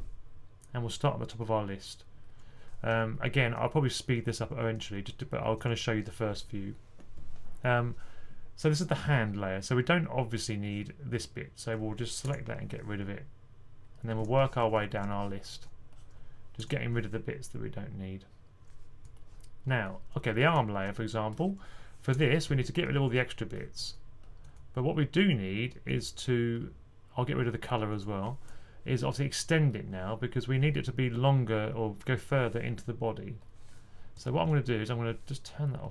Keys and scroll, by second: 3.8-4.2 typing, 14.2-15.0 typing, 20.0-20.7 typing, 22.0 typing, 23.6-24.3 typing, 34.3 typing.